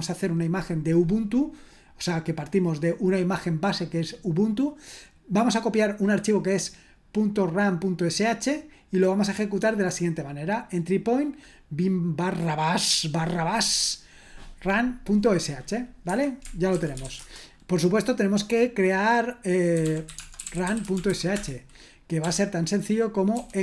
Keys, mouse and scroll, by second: 15.7 click, 16.1 Escape, 16.5-17.5 typing, 19.5-23.6 typing.